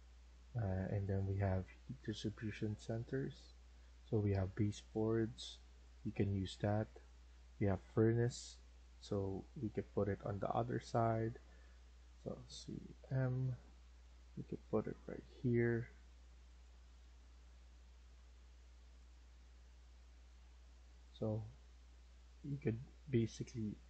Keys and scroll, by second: 12.5-12.9 typing, 16.7 Escape, 17.0 Escape, 17.3 Escape.